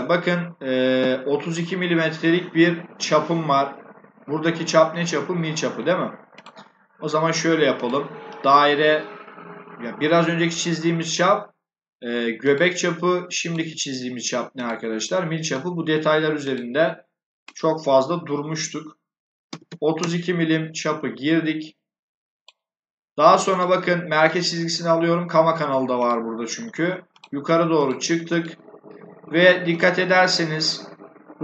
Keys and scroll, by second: 19.2-20.0 typing.